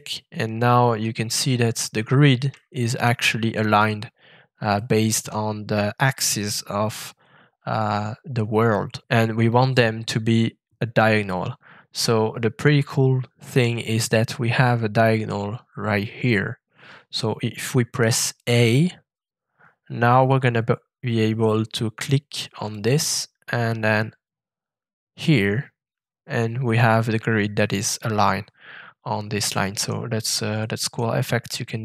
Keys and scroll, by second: 18.4 a.